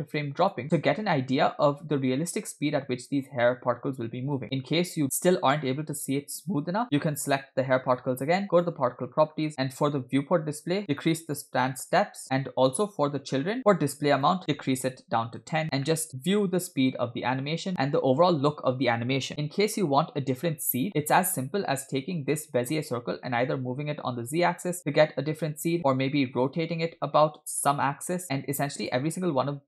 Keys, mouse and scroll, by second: 0.6 space, 1.7 space, 2.0 space, 4.4 space, 7.1 click, 9.1 click, 9.1-9.5 scroll down 2, 10.2 scroll down 7, 10.8 click, 12.2-12.6 scroll up 8, 12.7-14.1 scroll down 6, 14.1 scroll down 1, 14.2-15.9 drag, 15.9 middle click, 16.1 space, 20.8 space, 21.0 middle click, 21.8 click, 23.8 g, 24.8 space, 26.4 space, 26.6 r, 29.4 space.